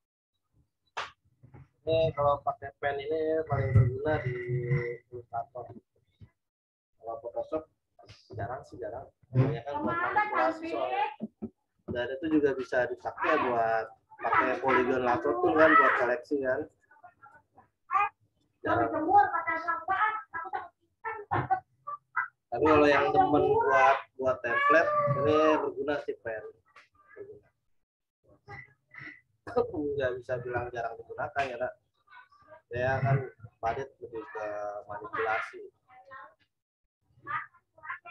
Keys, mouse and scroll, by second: 3.7 m, 4.2 click, 13.4 click, 13.6 right click, 14.6 click, 15.8 right click, 16.6 click, 17.3 right click, 18.3 click, 22.0 right click, 23.1 click, 27.3 click.